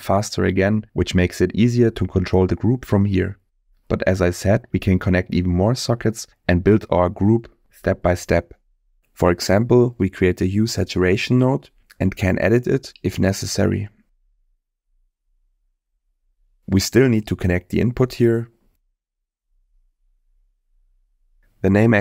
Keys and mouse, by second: 0.4-2.5 drag, 3.6 click, 4.4 middle click, 5.9 middle click, 6.9 click, 9.6 shift+a, 14.5-16.9 drag, 17.4 middle click, 18.3 click, 19.9 click, 21.3 click.